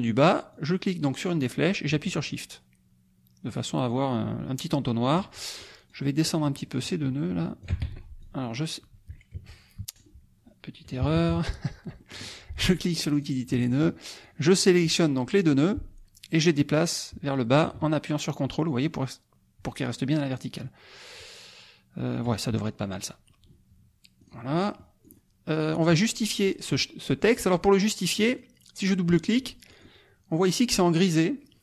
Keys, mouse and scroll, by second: 0.5-5.3 drag, 5.6 shift+click, 6.8 shift+click, 7.8 ctrl+shift+z, 8.2-10.2 ctrl+shift+drag, 9.8 F2, 11.1 KP_Subtract, 12.2 middle click, 13.1 click, 13.5 click, 14.2 click, 16.7-22.4 drag, 22.5 ctrl+middle click, 24.2 click, 24.5 middle click, 25.0 click, 25.7 click, 26.5 click, 27.2 click, 28.1 click, 29.7 click.